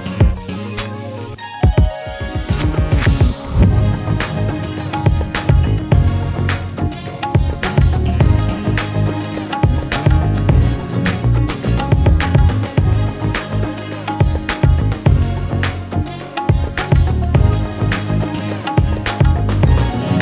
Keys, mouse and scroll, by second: 0.6 alt+middle click, 2.9 click, 3.7 click, 4.1 alt+middle click, 5.3 click, 5.5-6.6 scroll, 6.6 click, 7.3 click, 7.7 scroll, 8.2 scroll, 9.3 click, 10.1 click, 10.8 click, 11.5 click, 12.4 click, 13.1 alt+middle click, 13.7 click, 14.2 click, 14.7 middle click, 15.1 alt+middle click, 15.6 click, 16.0 click, 16.2 middle click, 16.3-18.0 scroll, 16.6 a, 18.4 scroll, 18.4 q.